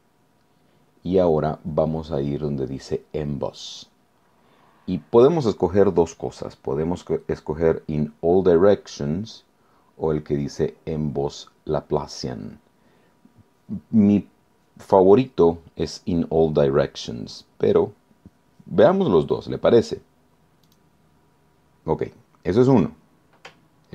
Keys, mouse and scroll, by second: 20.7 click.